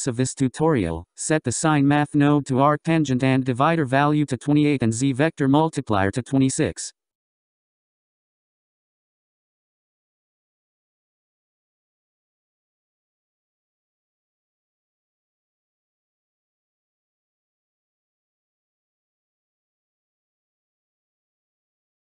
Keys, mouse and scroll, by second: 7.6-8.0 scroll up 9, 8.4-10.8 drag, 13.2-16.3 drag, 18.2-18.8 scroll down 10, 19.3-19.6 scroll up 10, 20.4-22.1 drag.